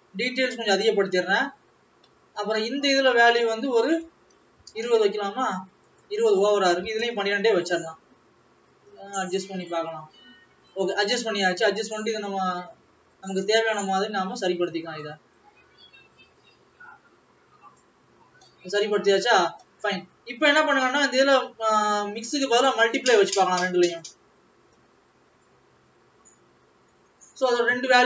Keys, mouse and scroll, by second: 22.0 click, 23.0 click, 24.1 click.